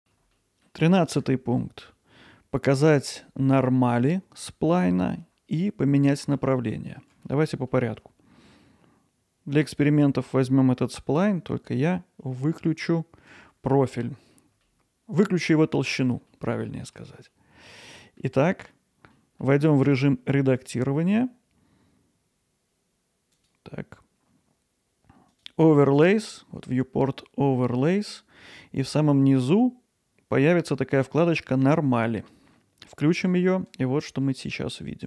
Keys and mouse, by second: 0.0 middle click, 0.3 alt+middle click, 1.9-3.1 ctrl+alt+middle drag, 3.8-5.2 alt+middle drag, 6.4-7.0 middle drag, 7.2 alt+middle click, 7.7 ctrl+alt+middle click, 13.9-14.3 middle drag, 14.6-15.9 alt+middle drag, 16.3-16.9 ctrl+alt+middle drag, 17.3-18.2 alt+middle drag, 19.1 middle click, 34.2 alt+middle click.